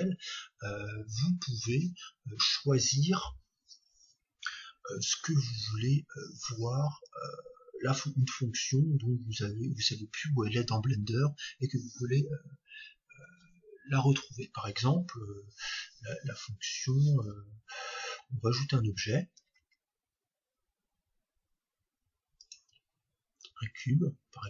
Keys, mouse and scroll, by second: 19.6 shift+a, 23.7-24.4 drag.